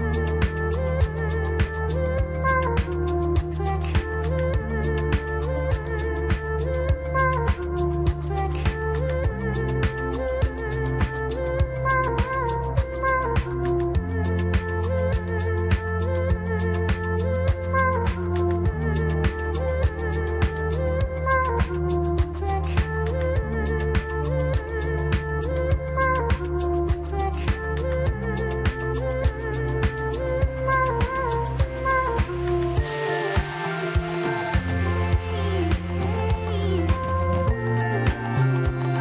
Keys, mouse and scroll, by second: 3.0 KP_1, 5.4-5.8 scroll up 2, 5.8 click, 6.5-8.2 scroll down 1, 8.2-9.4 scroll down 1, 11.1-12.7 scroll up 2, 12.7 shift+z, 13.3 click, 14.5 shift+a, 20.2-21.6 scroll down 4, 21.6 s, 24.3-25.1 scroll up 5, 25.1-26.8 shift+middle drag, 26.8 g, 30.2 s, 33.8-34.2 scroll up 3, 34.2-35.0 shift+middle drag, 35.0-36.0 scroll up 1, 36.0 s, 38.1-39.0 scroll down 5.